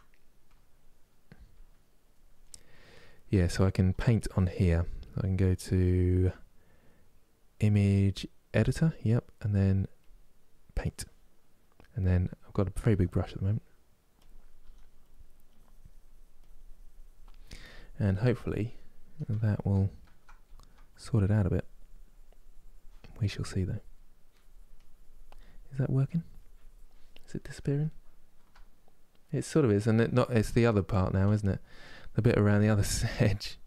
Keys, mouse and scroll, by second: 13.8 f, 14.7 f, 15.1-26.9 drag, 26.9-33.6 middle drag.